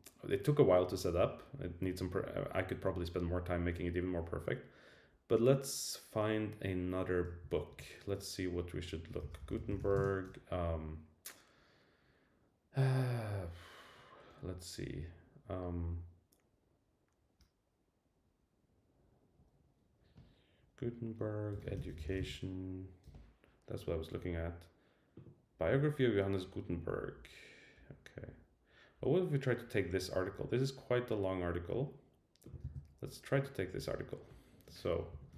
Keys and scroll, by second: 7.6 super+t, 23.1 Return, 32.6 super+c.